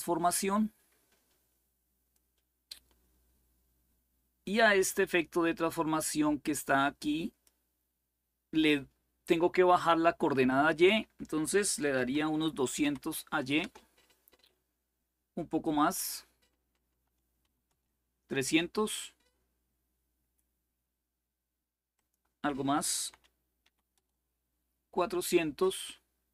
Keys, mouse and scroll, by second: 0.0-2.5 drag, 4.9-7.8 drag, 10.2-11.2 drag, 12.3-13.0 typing, 13.3 Return, 15.7 click, 16.7 Delete, 17.2 3, 17.4 Return, 21.7 click, 22.7 Delete, 23.4 4, 23.7 Return.